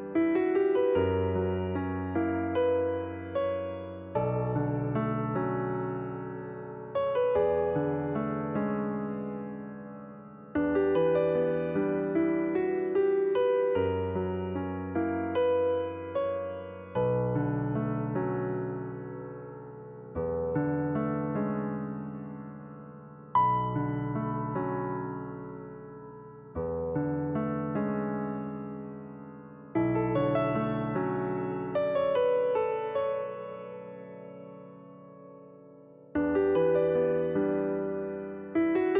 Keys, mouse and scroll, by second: 0.7 shift+d, 2.1 r, 4.3 scroll down 2, 4.5 shift+middle click, 5.3 click, 6.6 drag, 8.7 click, 10.0 click, 11.1-12.3 drag, 13.0-14.9 drag, 14.9-16.0 shift+middle drag, 16.0 click, 21.8 click, 22.5-23.9 middle drag, 23.9 click, 24.5 click, 25.7 r, 27.9 click, 28.9 click, 30.1 click, 31.8 click, 32.8 click, 34.1-34.6 scroll up 3, 34.7-38.4 middle drag, 38.4 click, 38.7-38.9 middle drag.